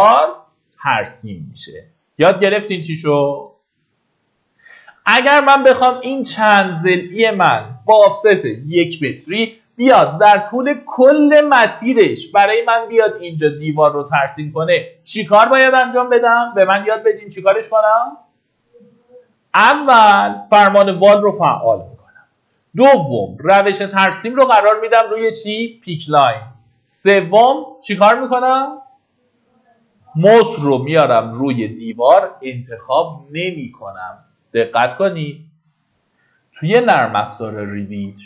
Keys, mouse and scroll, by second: 4.9 middle click, 5.8-6.4 scroll up 1, 36.5 Escape.